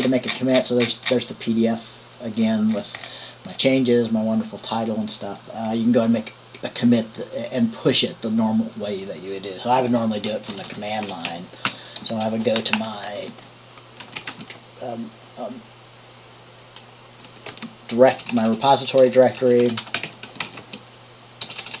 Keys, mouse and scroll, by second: 2.0 click, 11.3 Return, 11.5-15.2 typing, 17.5-21.8 typing.